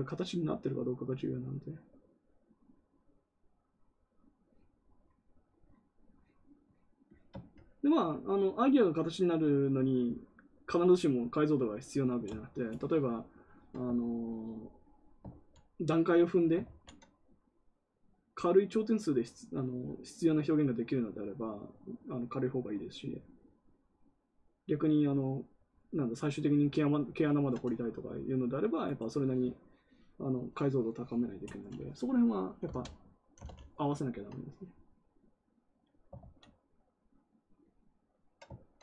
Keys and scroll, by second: 15.2 ctrl+z, 16.5 ctrl+z, 32.3-33.4 typing, 36.1 ctrl+z.